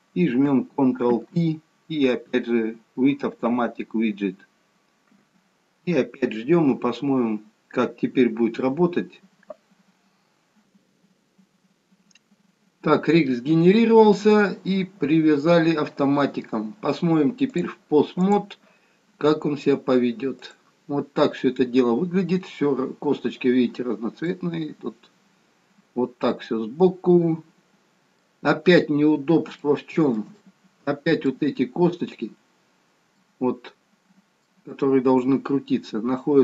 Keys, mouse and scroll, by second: 1.2 ctrl+p, 12.9-13.3 scroll up 1, 13.3-15.9 scroll down 1, 15.9-16.4 scroll down 1, 17.7 click, 20.5 click, 21.2-22.4 scroll up 2, 22.4-23.4 scroll down 1, 23.9 scroll down 1, 24.3 middle click, 29.2-29.7 scroll up 2, 29.7 shift+middle click, 30.5 middle click, 33.2 middle click.